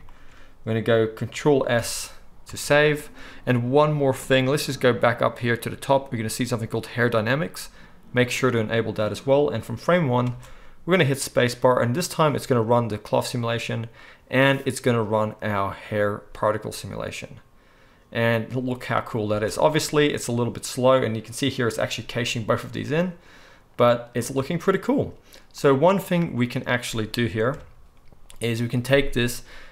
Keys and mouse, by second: 1.8 ctrl+s, 2.5 ctrl+s, 7.0-21.0 right drag, 10.2 space, 19.4 space, 21.0-22.0 middle drag, 22.2 space, 23.0-23.9 middle drag, 24.5 space, 26.4-27.5 middle drag, 27.5 KP_0, 28.4-29.7 middle drag.